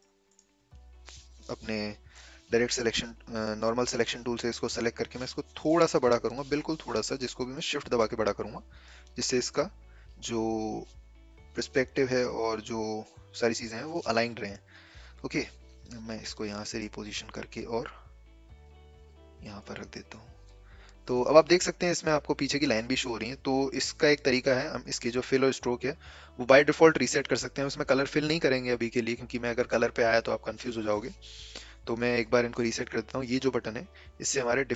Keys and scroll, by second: 4.7 v, 6.9 v.